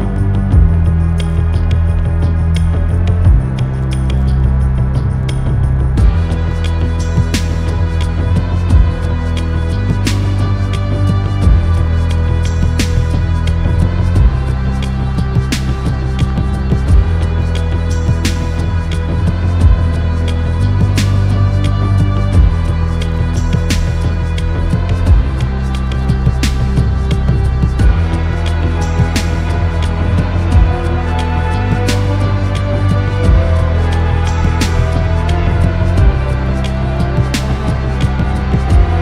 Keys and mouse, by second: 0.2-8.9 drag, 20.4 middle click, 23.4 click, 24.2 middle click, 27.5 click, 29.7 click, 36.5 click.